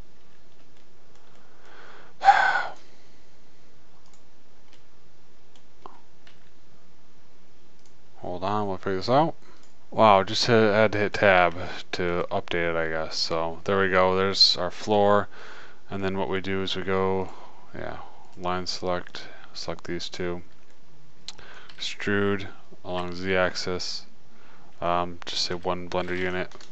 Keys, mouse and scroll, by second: 0.5 click, 8.3 s, 10.0 Tab, 12.0 Tab, 12.6 Tab, 15.2 middle click, 17.6-18.7 drag, 18.7-23.0 middle drag, 22.1 e.